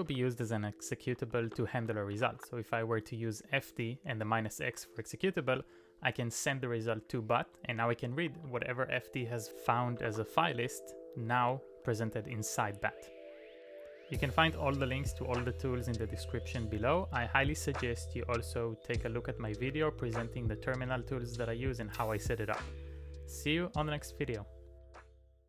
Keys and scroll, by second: 0.0-3.4 typing, 4.8 ctrl+d, 5.3 ctrl+d, 6.0 ctrl+d, 10.0 q.